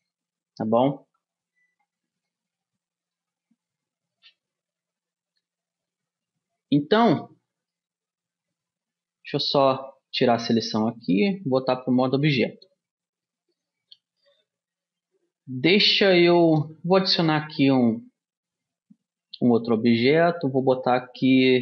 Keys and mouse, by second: 4.2 a, 7.6-11.2 middle drag, 8.2 a, 10.6 a, 11.6-13.8 middle drag, 11.9 Tab, 15.3 middle click, 15.5-17.6 middle drag, 17.6 shift+a.